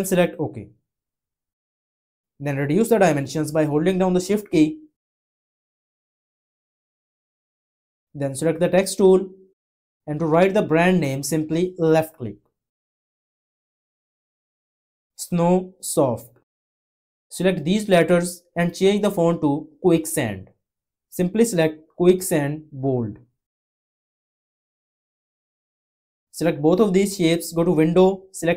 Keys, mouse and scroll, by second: 3.8 click.